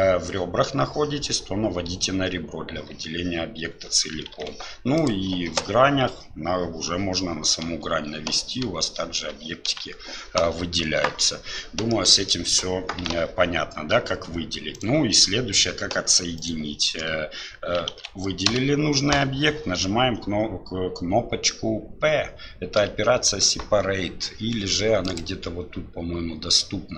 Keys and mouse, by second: 4.4 alt+a, 5.0 click, 11.9 alt+click, 17.9 alt+a, 18.5 l.